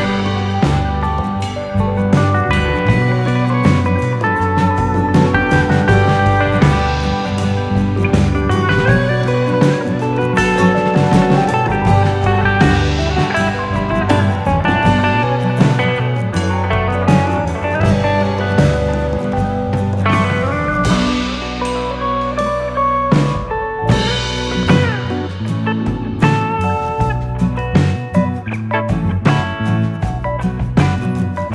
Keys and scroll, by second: 31.2 u.